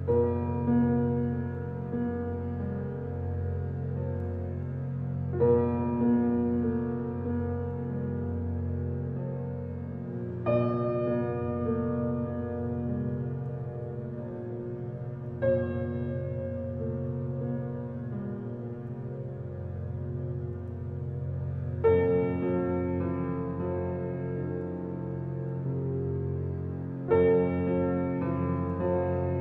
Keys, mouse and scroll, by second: 3.1 click, 3.5 scroll up 4, 4.9 click, 5.4-6.2 shift+middle drag, 6.2 shift+click, 6.7 shift+click, 7.2 shift+click, 7.6-8.9 middle drag, 8.9 shift+click, 10.1-11.9 drag, 12.0 click, 12.2 scroll down 1, 12.6-13.2 middle drag, 13.2 click, 13.8 click, 14.9 scroll down 1, 15.3-17.1 middle drag, 17.1 click, 17.6-18.1 middle drag, 18.1 click, 18.9 drag, 24.3 click, 24.6 middle drag, 25.0-26.0 scroll up 4, 26.0-26.6 middle drag, 26.6 click, 27.5 click.